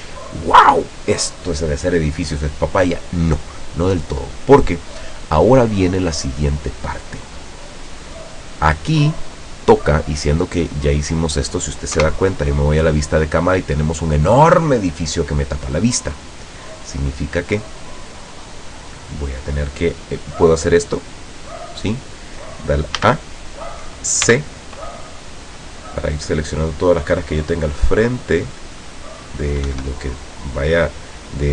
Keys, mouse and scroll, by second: 12.1 KP_0, 15.9-17.1 drag, 20.9 click, 23.1 a, 24.3 c, 25.2-29.5 drag, 29.7 Escape.